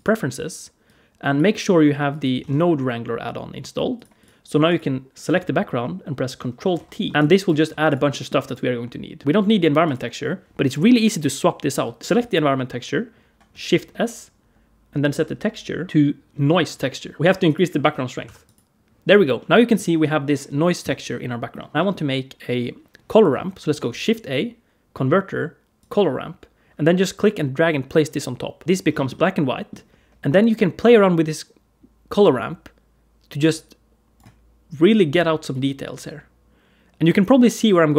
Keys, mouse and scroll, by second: 4.0 click, 4.5 click, 7.0 ctrl+t, 7.1 click, 7.1 g, 7.5 g, 7.9 middle click, 8.3 click, 9.2 click, 9.2 middle click, 9.7 click, 12.0 click, 12.0 click, 13.5 shift+s, 17.2 middle click, 17.3 click, 19.2 middle click, 20.7 middle click, 21.7 middle click, 21.7 click, 21.7 middle click, 21.7 g, 23.7 shift+a, 28.6 middle click, 28.6-29.0 scroll down 2, 29.0 middle click, 30.6 click, 34.6 click, 35.8 click.